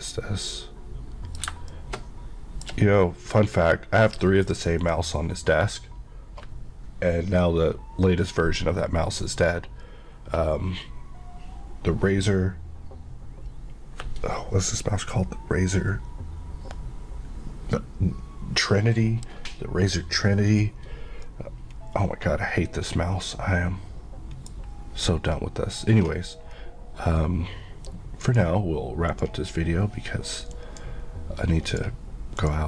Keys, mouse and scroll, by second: 1.8 shift+middle click, 4.9 click, 21.3 middle click, 21.8 KP_Decimal, 22.3 KP_Decimal, 22.8 KP_Decimal, 23.3 KP_Decimal, 28.3 click, 29.1 click.